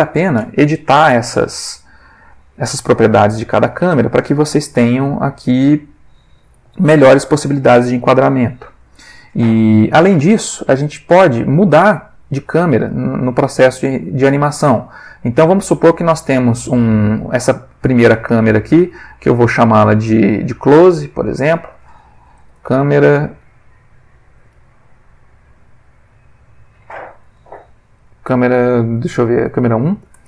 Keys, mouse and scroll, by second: 11.5 click, 13.7-14.4 ctrl+middle drag, 20.1 click, 21.3 click, 22.5-23.2 typing, 29.9 1, 30.1 Return.